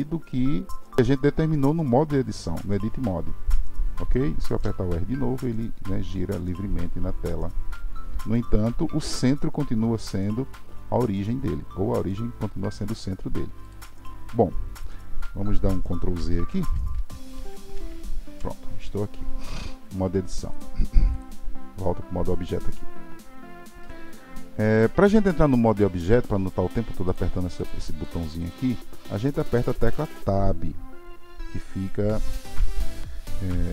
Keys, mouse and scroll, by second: 16.5 ctrl+z, 17.0 ctrl+z, 17.3 ctrl+z, 17.7 ctrl+z, 20.5-23.7 drag, 27.0 click, 28.0 click.